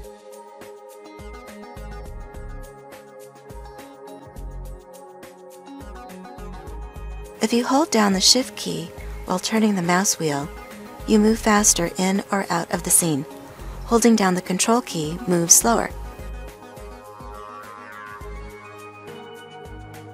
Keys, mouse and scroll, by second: 0.0-20.1 middle drag.